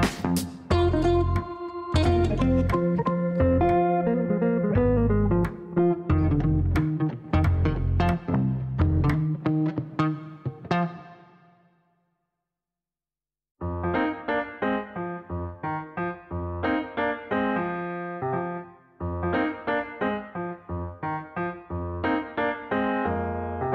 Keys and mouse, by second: 2.5-4.0 typing, 5.0 click, 5.8 click, 11.3-12.6 typing, 13.9 click, 14.9 click, 15.4 BackSpace, 16.5 click, 17.1 click, 18.5 click, 20.1 click, 20.7 click, 22.1 click.